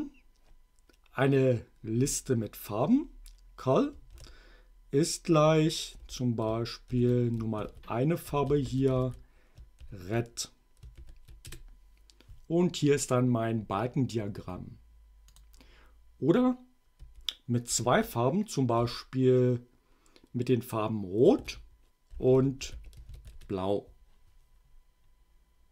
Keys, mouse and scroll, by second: 4.1 shift+0, 6.0-9.8 typing, 10.9 shift+9, 11.5 shift+Return, 15.4 click, 17.0 Up, 17.7 Left, 18.8 ,, 21.4-23.6 typing.